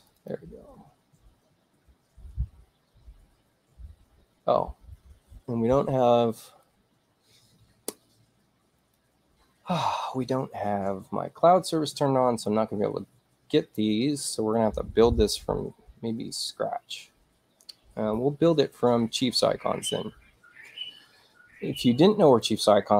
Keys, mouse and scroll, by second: 0.1 click, 0.3 click, 2.4-4.2 middle drag, 2.4-3.9 scroll down 2, 3.9-4.2 scroll up 2, 8.9 click, 12.6 middle click, 12.6-12.9 scroll up 2, 14.0 middle click, 18.0-19.4 middle drag, 20.2-21.3 middle drag, 22.3 click.